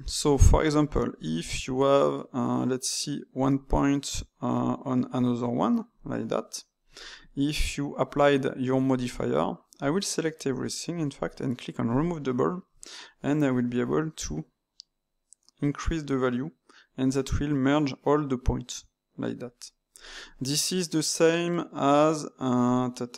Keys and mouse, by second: 0.5 Tab, 1.1 click, 4.5 click, 8.9-9.7 drag, 9.7 a, 10.5 a, 11.8-16.8 drag, 20.3-23.1 right drag.